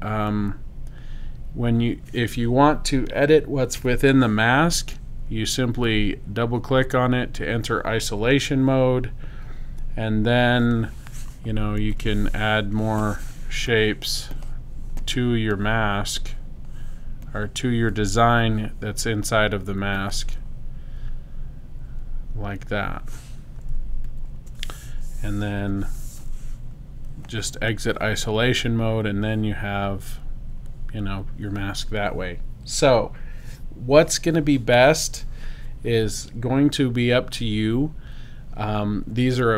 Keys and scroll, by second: 25.6 v.